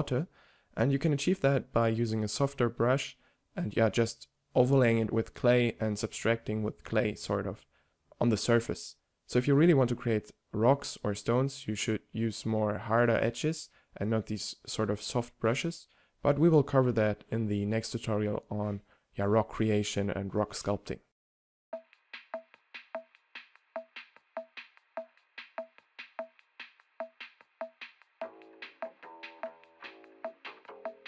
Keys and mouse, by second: 4.5-7.2 middle drag, 9.1 f, 12.5 shift+f, 15.5 ctrl+z, 16.1 f, 22.0-23.4 typing, 23.5 ctrl+z, 24.9 f, 25.0-25.3 drag, 25.6-26.9 drag, 26.9 click, 27.0 a, 27.7 middle click, 27.9 click, 28.1 click, 28.3 f, 28.4-29.4 drag, 29.4 ctrl+z, 29.6 ctrl+z, 29.6 f, 29.7 f, 30.2 f, 30.6 click.